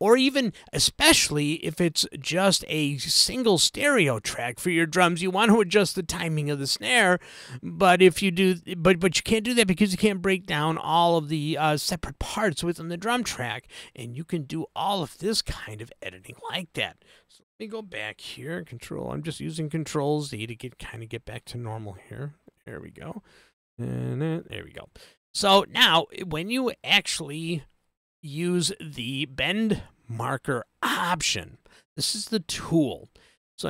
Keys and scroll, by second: 18.5 super+z.